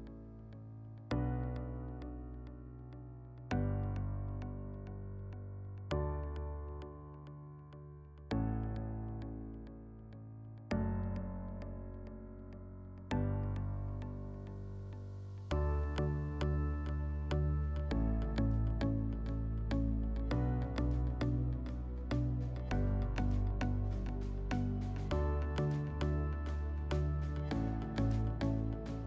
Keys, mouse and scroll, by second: 1.4 click, 2.4 click, 3.5 click, 4.5 click, 5.9 click, 6.6 click, 7.3 click, 9.7-11.3 drag, 12.6-14.2 drag, 18.3-19.9 drag.